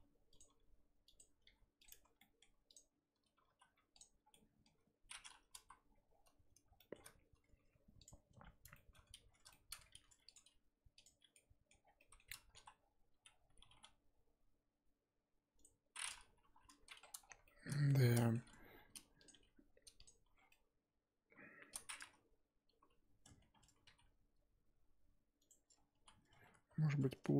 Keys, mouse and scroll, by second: 0.5 s, 1.4 r, 1.9 Tab, 2.2 middle click, 2.7 click, 3.5 ctrl+z, 4.0 click, 4.3 middle click, 4.7-5.1 scroll up 1, 5.1-5.5 scroll down 1, 5.5 KP_1, 5.9-6.4 scroll up 2, 6.8-8.1 scroll up 2, 6.8 shift+middle click, 8.1 click, 8.2 scroll up 2, 8.3 Tab, 8.7 shift+middle click, 8.9-9.3 scroll up 4, 9.3 scroll down 1, 9.5 shift+middle click, 9.9 r, 10.3 g, 11.3 middle click, 11.7 scroll up 1, 11.8 scroll down 4, 12.0 middle click, 12.5 KP_1, 12.8-13.6 scroll up 1, 13.7 g, 16.0-16.4 scroll down 4, 16.4 KP_3, 17.0-17.4 scroll down 5, 17.4 shift+middle click, 17.7-18.7 scroll up 11, 18.2 shift+middle click, 18.7 r, 19.3 g, 20.2 Tab, 20.4 scroll down 1, 20.5-22.7 middle drag, 22.7 KP_1, 23.1 scroll up 1, 23.4 Tab, 23.8 s, 25.6-25.9 scroll up 1, 25.9 z, 27.3 z.